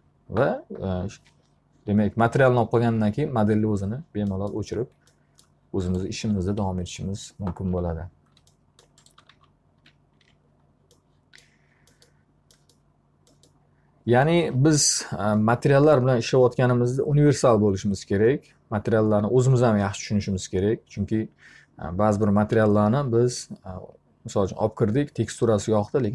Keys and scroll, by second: 6.2 F3, 9.0-10.3 typing.